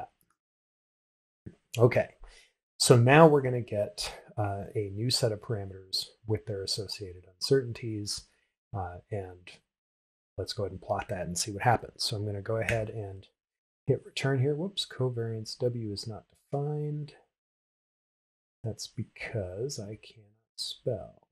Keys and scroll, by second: 13.4 shift+Return.